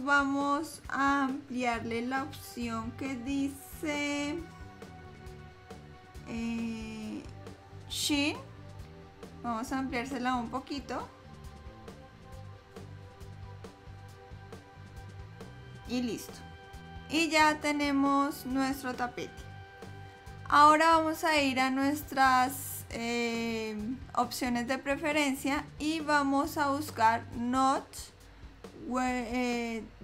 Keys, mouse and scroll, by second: 0.2 click, 11.0 click, 16.8 click, 16.8-18.3 scroll down 1, 19.5 click.